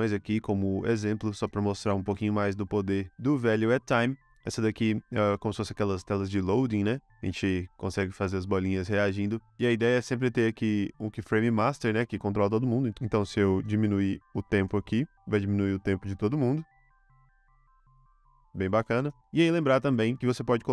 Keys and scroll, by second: 0.8 space, 4.6 space, 9.1 space, 12.9 super+z, 14.5 space, 18.9 space, 20.1 space.